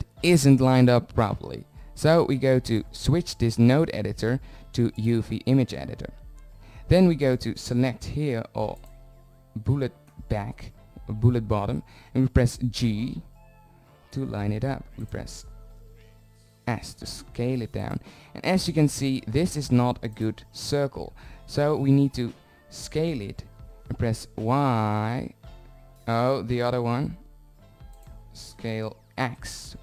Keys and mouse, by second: 2.8-7.2 middle drag, 12.6 g, 15.5 s, 18.2 g, 22.5 s, 27.9 s.